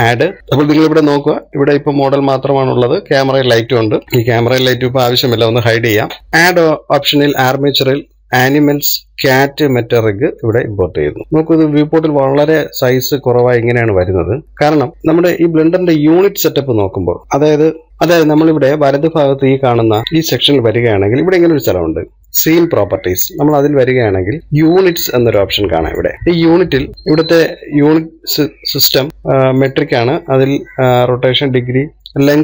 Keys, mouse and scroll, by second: 0.4-1.8 drag, 5.0 click, 5.7 click, 11.3-12.5 scroll up 1, 12.5-13.0 shift+middle drag, 13.0 scroll up 1, 14.1 shift+middle click, 14.4 scroll down 9, 14.7 KP_3, 14.9-17.2 shift+middle drag.